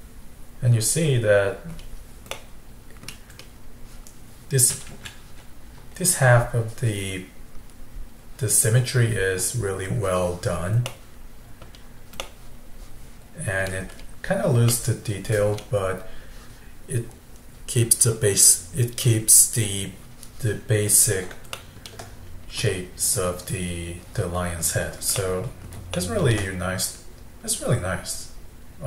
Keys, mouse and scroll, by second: 1.8-2.3 scroll down 2, 2.3-3.3 middle drag, 3.3-4.9 scroll up 1, 4.9 KP_1, 10.9 middle click, 11.6-12.3 scroll down 3, 12.3-13.9 middle drag, 13.9-14.7 scroll up 2, 14.7-17.9 middle drag, 21.6-24.6 shift+middle drag, 25.2-26.3 middle drag, 26.3-26.8 scroll down 1, 26.8 scroll up 2, 27.4 scroll down 2.